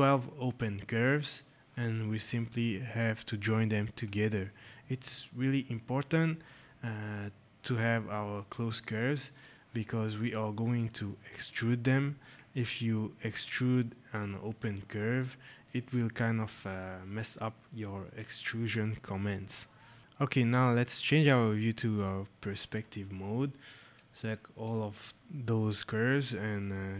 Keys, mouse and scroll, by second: 3.9 click, 8.8 click, 10.5 click, 14.0 click, 20.5 right click, 21.9 click, 23.0 right click, 23.9 click.